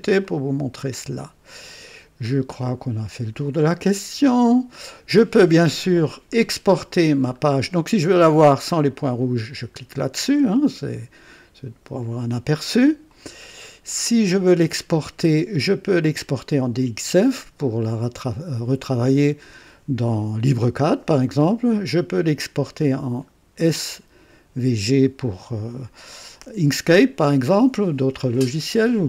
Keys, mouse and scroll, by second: 0.2-1.4 drag, 1.7 click, 2.2-3.0 scroll down 2, 3.4-4.9 middle drag, 6.4 scroll down 1, 7.0 scroll down 1, 8.9 click, 13.0 click.